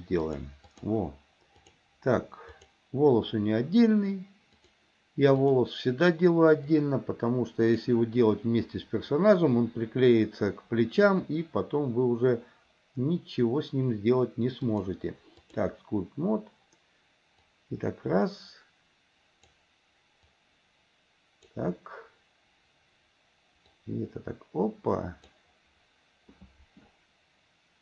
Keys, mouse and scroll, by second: 0.2 click, 1.8 click, 2.7 click, 4.6 click, 5.6 click, 6.9-8.1 drag, 14.8-15.9 drag, 17.6-19.9 drag, 20.5-21.8 drag, 23.8-25.6 drag.